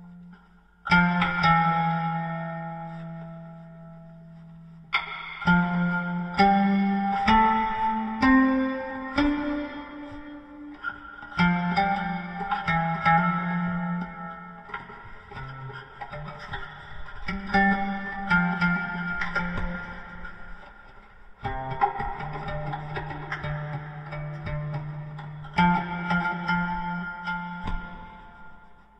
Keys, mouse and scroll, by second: 2.7 g, 6.3 s, 16.2 KP_1, 17.0 Tab, 25.7 ctrl+j.